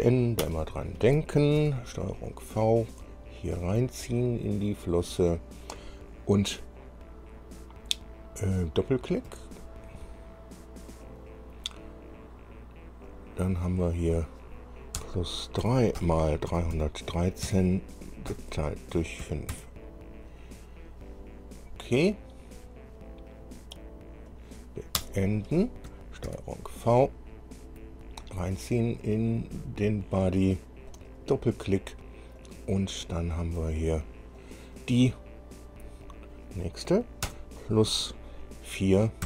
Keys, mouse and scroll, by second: 0.6 Return, 1.8 ctrl+v, 2.4 scroll down 2, 3.2-4.5 drag, 4.9 scroll down 2, 9.4 click, 11.2 click, 13.2 click, 14.2 click, 15.2 KP_Add, 15.8 KP_3, 17.6 KP_3, 18.5 KP_Divide, 19.4 KP_5, 19.7 KP_Enter, 24.5 click, 25.2 Return, 26.4 ctrl+v, 27.2 scroll down 2, 28.4-29.7 drag, 30.3 scroll down 2, 31.1 click, 32.6 click, 34.6 click, 36.2 click, 37.4 KP_Add.